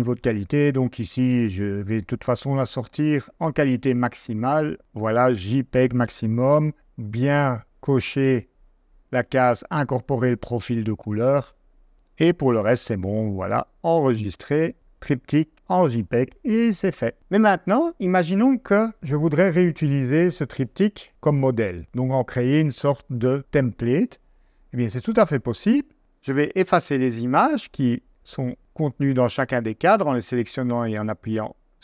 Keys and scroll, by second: 26.9 BackSpace, 28.6 BackSpace.